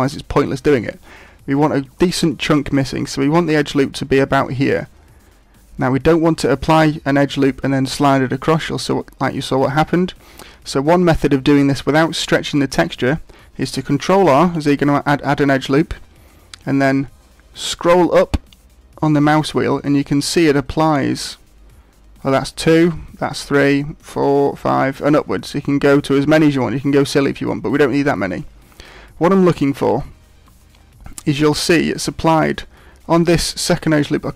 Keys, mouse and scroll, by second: 13.9 ctrl+r.